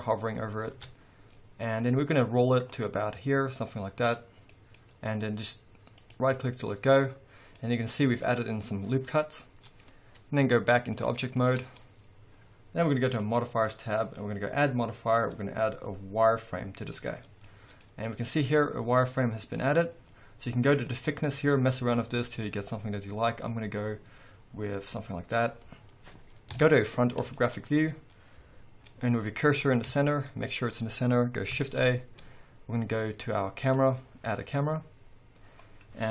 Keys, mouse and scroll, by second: 0.7 ctrl+r, 6.1 right click, 6.7-10.9 middle drag, 7.7 scroll down 2, 8.3-9.2 scroll up 2, 9.2-10.9 scroll up 1, 10.9-13.3 drag, 11.9-13.2 scroll down 2, 14.1-17.5 drag, 17.5-20.9 middle drag, 17.9-18.5 scroll up 2, 20.9-27.3 drag, 26.5 KP_1, 27.3-36.1 shift+middle drag, 27.6-29.3 scroll up 2, 29.3-29.9 scroll up 1, 31.7 shift+a, 34.3-34.8 scroll up 2, 34.8-35.4 scroll up 1, 35.4-36.1 scroll down 2.